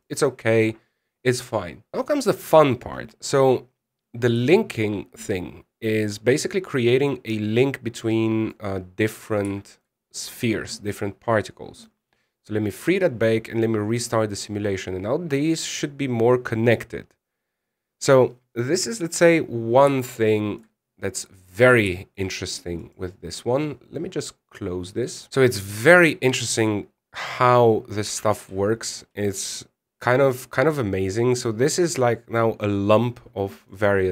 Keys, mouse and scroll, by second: 11.9 shift+middle click, 11.9-12.3 scroll up 8, 12.5 click, 13.6 click, 17.6-20.6 scroll up 3, 21.0 shift+middle click, 21.6-22.0 scroll down 2, 21.8 middle click, 22.7 shift+middle click, 23.6 right click, 25.3 click, 25.9-27.5 scroll down 28, 28.9 alt+a, 30.8 a, 31.9 scroll up 2, 32.2 middle click.